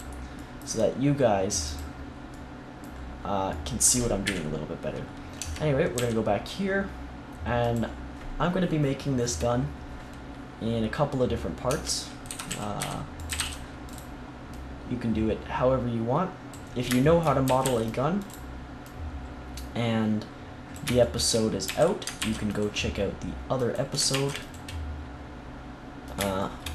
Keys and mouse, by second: 0.3-1.6 middle drag, 1.6-3.3 drag, 3.3 middle click, 4.2 KP_1, 5.3 Tab, 5.9 g, 7.8-10.0 drag, 11.6 Tab, 12.2-13.3 typing, 13.8-16.1 drag, 17.4 a, 17.6 c, 18.2-20.6 drag, 21.6 a, 22.1 ctrl+r, 23.7-24.9 drag, 24.1 ctrl+r, 25.1 click, 26.1 click.